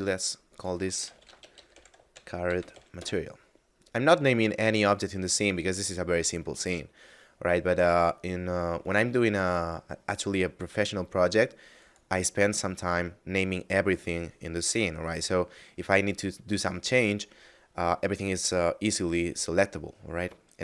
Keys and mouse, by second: 0.5 click, 0.9-2.6 typing, 2.9 Return, 8.6 right click, 11.7 click.